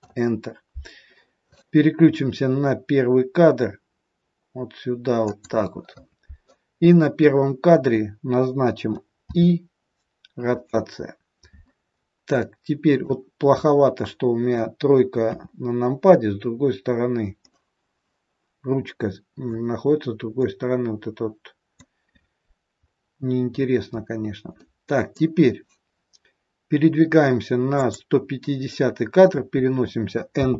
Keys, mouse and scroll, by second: 5.2 click, 9.2 i, 12.0 scroll down 2, 12.4 middle click, 15.1 KP_3, 17.3 middle click, 20.3 middle click, 22.8 scroll up 1, 23.6 scroll up 2, 24.6 middle click, 27.7 click, 30.3 n.